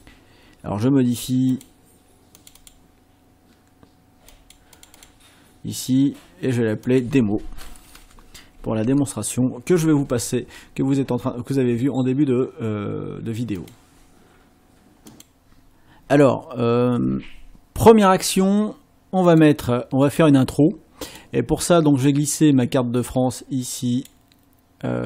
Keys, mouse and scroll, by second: 1.5 click, 2.4 click, 4.3 click, 4.8 click, 6.9 click, 7.6-8.8 typing, 13.6 click, 15.1 click, 19.3 click, 21.1 click, 22.1-24.2 drag.